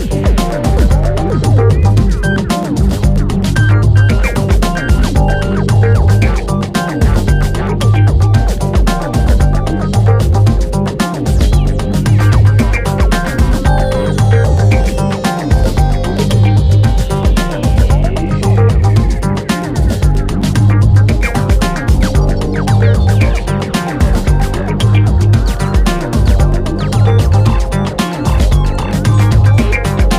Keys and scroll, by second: 10.8 BackSpace, 11.1 5, 18.5 3, 28.1 BackSpace, 29.0 super+z.